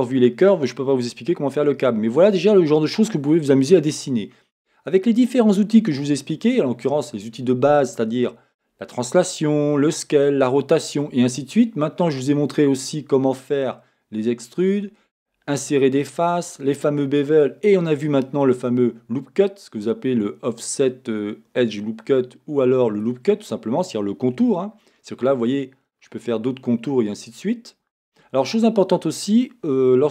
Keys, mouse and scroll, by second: 3.1 scroll, 21.8 click, 23.6-24.8 drag, 24.4 Escape, 24.8-26.2 middle drag, 26.2-28.1 scroll, 28.1 Escape.